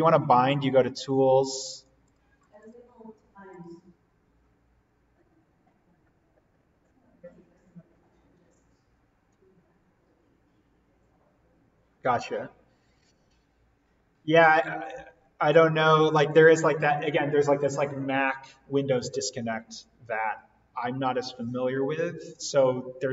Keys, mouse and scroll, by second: 1.7 click, 20.2 click.